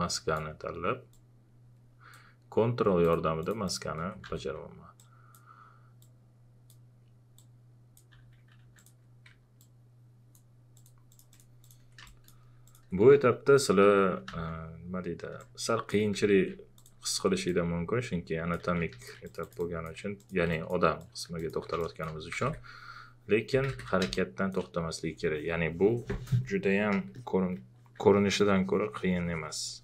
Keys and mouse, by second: 4.2 w, 5.0-8.1 drag, 8.1 q, 8.6 ctrl+a, 8.8 ctrl+click, 9.6-12.0 ctrl+drag, 12.0 space, 12.5 click, 14.3 w, 15.4 click, 15.5 w, 16.1 ctrl+z, 16.8 alt+click, 18.6 q, 18.9 ctrl+a, 19.0 ctrl+click, 22.0-24.2 typing, 24.1-26.9 drag, 27.0 click, 28.1 alt+click.